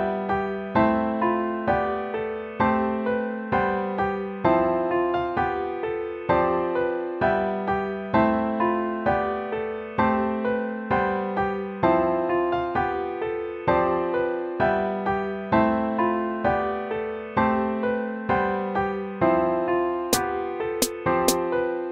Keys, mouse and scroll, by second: 3.7 ctrl+-.